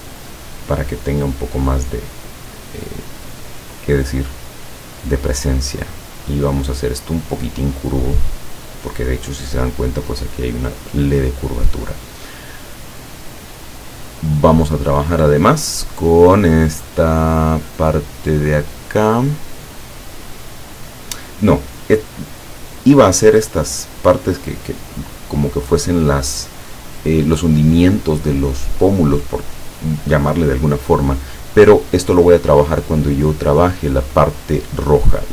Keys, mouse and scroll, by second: 2.7 click, 4.8-9.0 drag, 14.9 click.